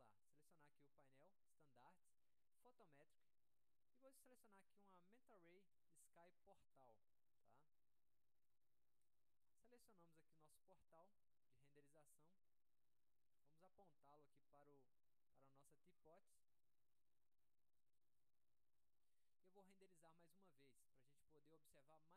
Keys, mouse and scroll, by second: 0.4 click, 2.8 click, 5.3 click, 5.9 middle click, 6.2-6.6 scroll down 1, 6.7 alt+middle click, 7.6-8.6 drag, 9.2 middle click, 10.0 alt+middle click, 10.8 click, 12.3-13.6 drag, 14.5-15.9 drag, 16.1 alt+scroll up 1, 16.2 alt+middle click, 16.8-17.5 scroll up 1, 17.2 alt+middle click, 18.2 middle click, 18.4-19.0 scroll up 2, 19.0 alt+middle click, 19.9 middle click, 20.0-20.4 scroll up 2, 20.4 middle click, 21.2 alt+middle click, 21.7 middle click.